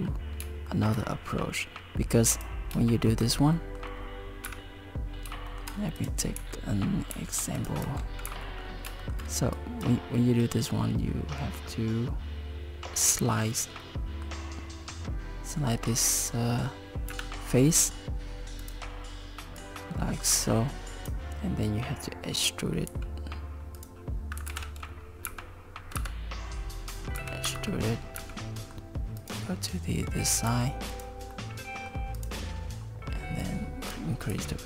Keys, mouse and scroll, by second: 0.1 scroll up 3, 0.7 shift+middle click, 2.3 click, 2.9 shift+middle click, 3.6 middle click, 4.5 KP_7, 5.5 shift+middle click, 6.0 click, 6.4 z, 7.0 z, 7.6 click, 7.9 Tab, 8.3 z, 8.6 scroll up 3, 9.0 shift+middle click, 9.6 click, 12.4 scroll down 3, 13.8 middle click, 17.1 KP_7, 18.6 click, 19.6 click, 22.9 e, 24.5 ctrl+z, 25.3 g, 27.2 e, 28.2 g, 30.0 Tab, 30.5 Tab, 30.9 click, 31.3 middle click, 32.2 click, 33.4 click, 34.3 z.